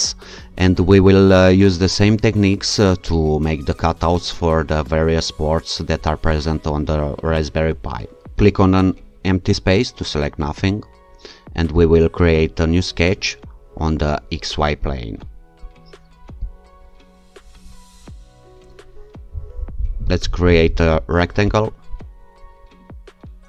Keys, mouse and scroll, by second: 8.4 click, 11.8 click, 14.8 click, 16.5 click, 20.1 click, 21.5 click.